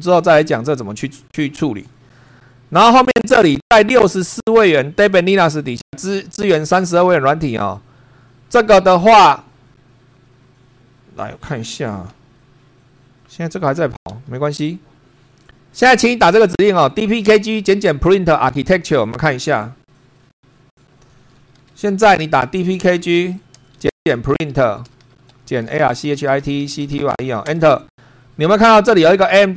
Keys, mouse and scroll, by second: 12.1 super+2.